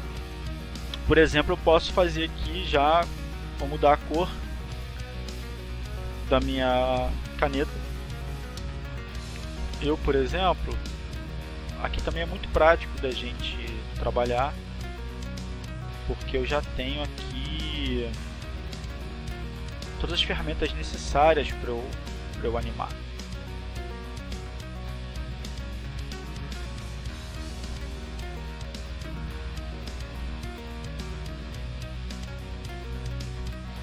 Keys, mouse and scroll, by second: 0.1 click, 0.7 click, 1.9 KP_2, 2.1 KP_Enter, 10.3 click, 12.2 click, 13.4 click, 14.7 click, 16.5 click, 18.1-19.1 drag, 19.8 click, 21.8 click, 23.5 click, 24.6 click, 26.1 click, 27.1 click, 28.6 click, 30.1-32.0 drag, 32.8 click.